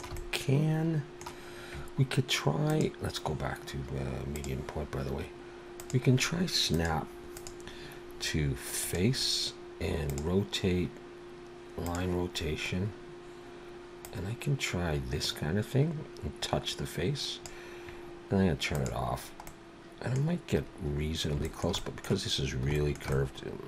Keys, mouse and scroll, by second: 0.2 middle click, 2.7 click, 6.7 click, 7.4 click, 14.0 click, 18.8 click, 19.5 middle click, 20.6 scroll up 1, 21.5 shift+middle click, 21.8 middle click, 22.8 shift+middle click, 23.1 middle click.